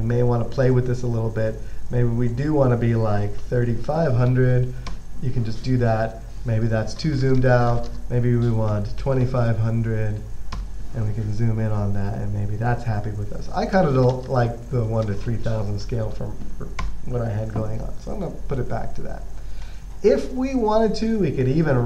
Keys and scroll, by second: 3.7-5.2 typing, 7.0-9.6 typing, 10.8 typing, 14.2 typing, 15.9-17.1 typing.